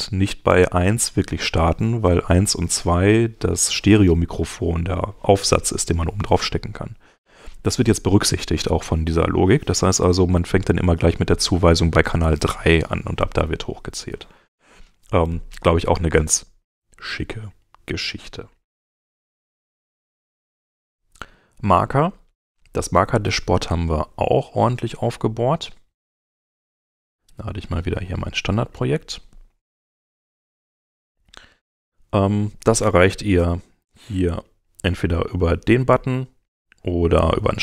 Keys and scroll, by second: 19.0 super+Tab, 22.4 super+Tab.